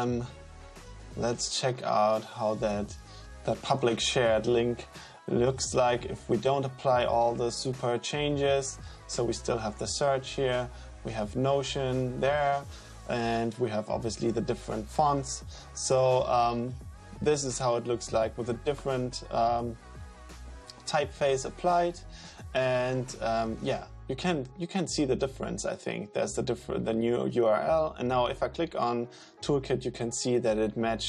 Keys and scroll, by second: 3.9 Return.